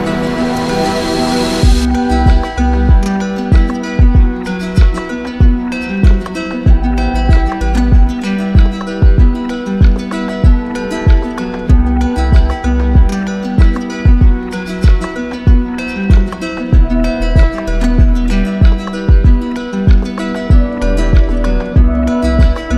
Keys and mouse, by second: 8.7 alt+click, 10.0 alt+click, 12.7 alt+click, 13.9 alt+click, 17.2 alt+click, 19.4 alt+click.